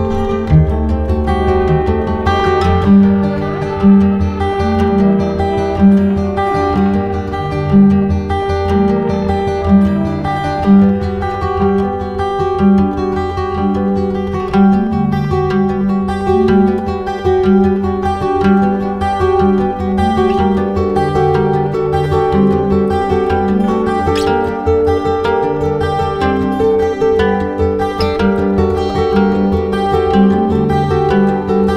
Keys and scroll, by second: 25.5 space, 30.1 ctrl+j.